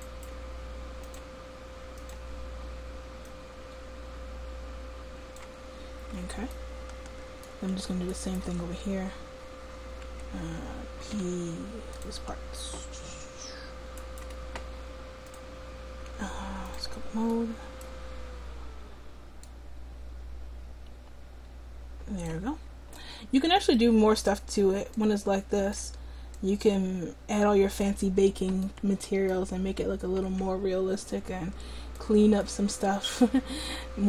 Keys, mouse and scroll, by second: 8.2 click, 8.6 Tab, 9.4 click, 11.2 p, 12.5 Tab, 13.1-14.4 drag, 15.9-17.3 drag, 22.7 middle click, 28.6 middle click, 30.4 middle click.